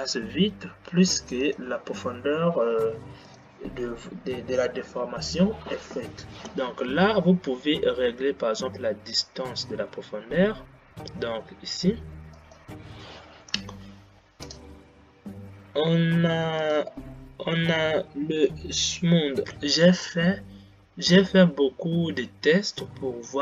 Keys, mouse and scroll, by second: 3.6 click, 12.9 click.